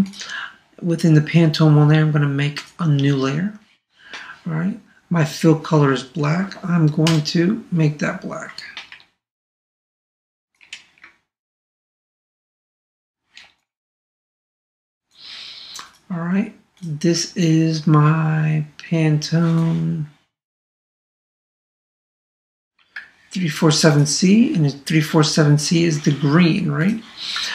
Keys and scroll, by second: 7.0 alt+BackSpace, 8.9 super+d, 11.4 super+space, 23.0 super+Tab, 27.4 super+Tab.